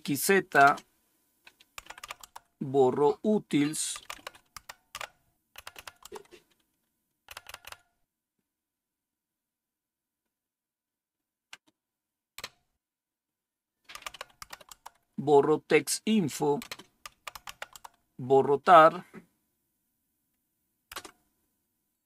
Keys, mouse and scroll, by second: 0.0-0.5 typing, 1.7-2.5 typing, 3.6-5.9 typing, 7.2-7.5 typing, 12.3 typing, 13.6-14.8 typing, 16.5-17.9 typing, 20.8 Return.